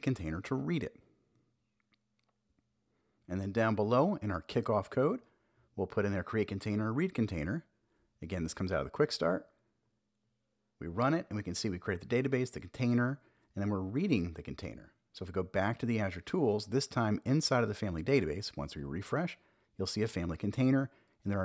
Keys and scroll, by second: 2.0 Return, 2.2 super+v, 2.8 super+s, 8.2 super+j, 9.0 Up, 9.4 Return, 13.2 Return, 13.9 shift+super+e.